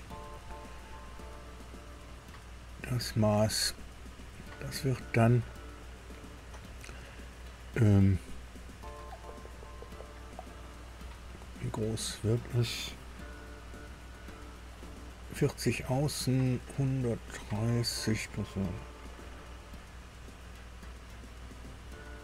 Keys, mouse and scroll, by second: 2.0 click, 4.1 click.